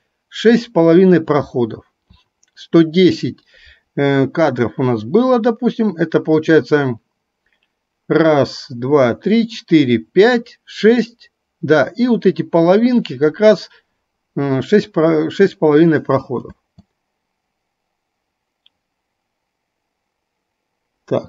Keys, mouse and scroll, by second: 16.5 space.